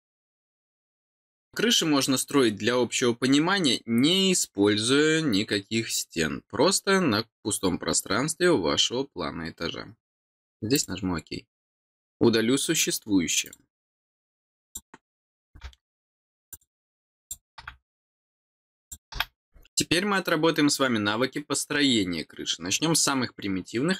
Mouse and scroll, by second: 10.7 click, 11.5 middle click, 13.4 click, 14.6 click, 16.4 click, 17.1 click, 18.1 click, 18.8 click.